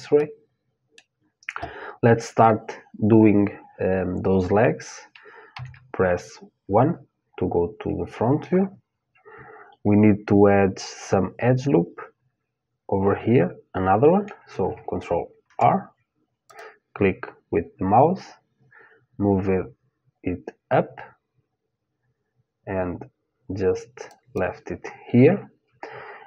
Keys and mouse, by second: 0.8-3.3 middle drag, 5.1 KP_1, 7.3-10.2 middle drag, 15.0 ctrl+r.